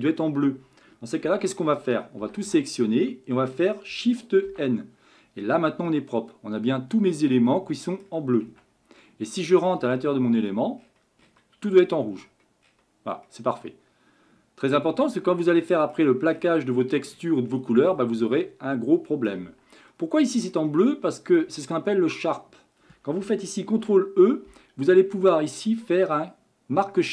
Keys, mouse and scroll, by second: 1.2 Tab, 2.2 a, 2.5 a, 4.5 shift+n, 5.9-8.4 middle drag, 8.4 scroll down 2, 8.6 Tab, 9.0-9.8 middle drag, 9.8-11.8 scroll up 29, 11.8-12.2 scroll down 1, 12.2-13.2 scroll up 11, 13.2-16.3 middle drag, 16.3-18.0 scroll down 37, 18.2-19.5 middle drag, 19.5 Tab, 19.9-21.5 middle drag, 21.5 shift+scroll up 1, 21.6-23.7 shift+middle drag, 23.7 ctrl+e.